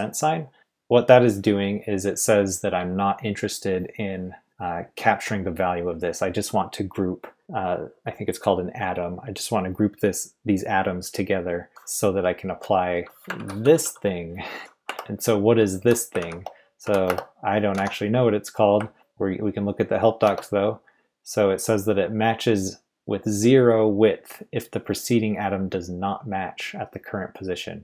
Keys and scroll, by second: 12.0-14.3 typing, 14.8 Escape, 15.3-17.7 typing, 20.2 Return.